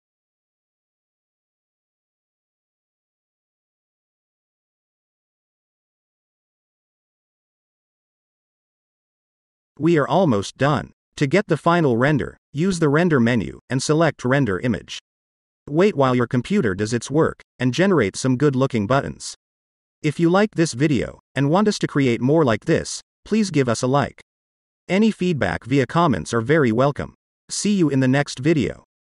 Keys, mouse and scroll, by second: 3.3 shift+middle click, 4.9 shift+middle click, 8.1-8.6 scroll up 1, 9.2-9.6 scroll down 1, 9.9-12.8 shift+middle drag, 13.7-14.7 drag, 15.8 click.